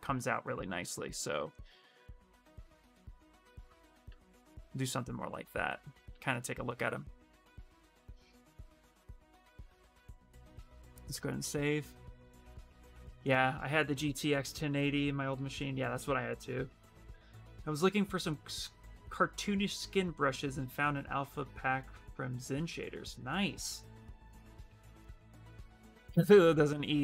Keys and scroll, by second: 10.1 ctrl+s, 10.8 Return, 11.0 Return.